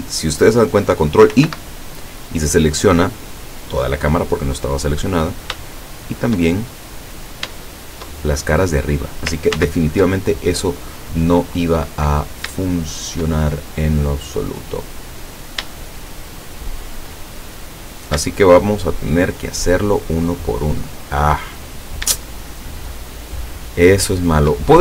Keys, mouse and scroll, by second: 1.4 ctrl+i, 3.1 scroll up 2, 3.8-4.2 scroll up 1, 4.6 scroll up 1, 4.6 middle click, 5.7 shift+middle click, 6.4 shift+scroll up 1, 7.3-7.7 scroll up 1, 7.7 shift+middle click, 8.5 shift+scroll up 2, 9.6 ctrl+z, 10.3-11.7 ctrl+drag, 12.7 shift+click, 13.5-14.9 shift+drag, 15.2-15.6 scroll up 2, 16.1-17.1 shift+drag, 17.9 right click, 18.5 shift+right click, 19.2 shift+right click, 19.8 shift+right click, 20.5 shift+right click, 21.0-22.0 shift+middle drag, 23.0 shift+right click, 23.7 shift+right click, 24.2 shift+right click.